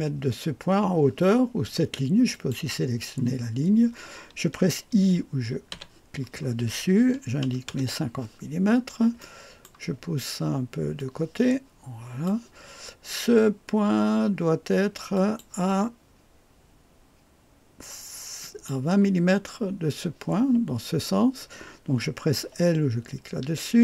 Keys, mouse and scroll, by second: 2.3 click, 7.2 KP_5, 7.4 KP_0, 7.7 Return, 9.2 click, 9.7-11.0 right drag, 11.0-14.7 drag, 15.1 click, 18.4 click.